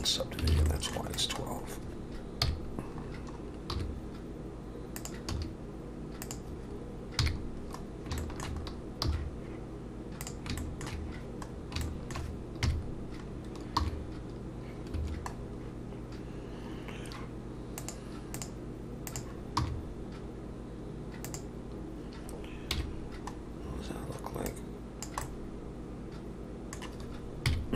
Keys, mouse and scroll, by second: 0.3 scroll down 2, 0.5 alt+a, 0.7 middle click, 1.2 click, 1.4-2.4 scroll down 3, 2.4 KP_1, 3.0-3.4 scroll down 5, 3.7 g, 5.3 s, 7.2 KP_3, 7.8 scroll down 2, 8.2 shift+middle click, 8.6-9.0 scroll up 3, 9.0 g, 10.6 shift+middle click, 11.5 scroll down 3, 11.8 shift+middle click, 12.6 KP_Decimal, 13.3-13.8 scroll down 2, 13.8 r, 15.4 scroll down 2, 17.8 click, 19.6 r, 22.7 KP_1, 23.4-23.8 scroll down 2, 24.5 click, 25.2 middle click, 27.5 KP_3.